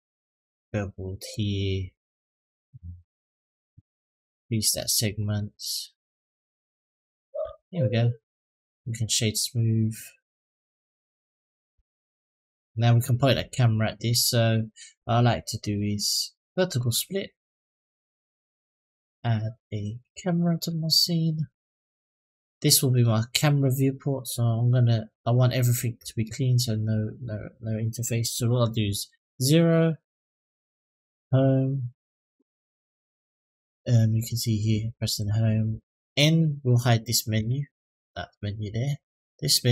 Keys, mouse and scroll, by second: 4.8 click, 5.0 click, 5.2 click, 5.6 click, 5.8 click, 6.0 click, 6.2 click, 7.2 Tab, 8.0 middle drag, 8.4 click, 8.7 right click, 9.8-10.2 middle drag, 10.5-11.0 scroll up 2, 11.6 shift+middle drag, 12.1 middle drag, 13.4 middle drag, 13.9-14.7 scroll down 3, 15.4-16.9 right drag, 18.9-21.2 drag, 28.9 KP_0, 31.0 Home, 37.2 n, 39.6 click.